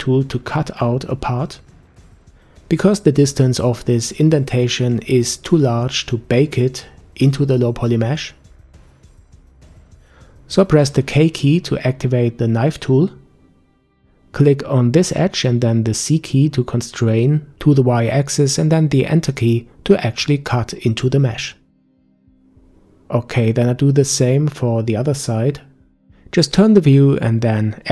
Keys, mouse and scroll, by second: 0.5 scroll down 4, 1.4-3.5 middle drag, 3.5-4.9 scroll up 1, 4.9 KP_5, 6.1-9.5 scroll up 4, 9.6 a, 9.8 a, 12.4 k, 23.1-24.1 scroll down 3, 24.1-26.3 middle drag, 26.3-26.9 scroll up 5, 27.5 shift+middle click.